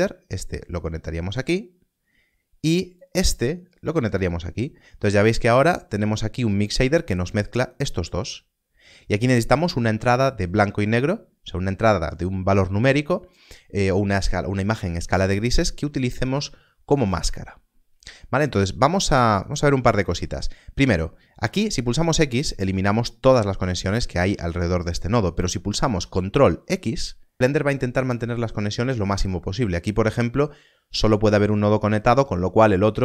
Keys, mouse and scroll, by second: 21.8 x, 24.2 ctrl+z, 25.0 click, 26.4 ctrl+x.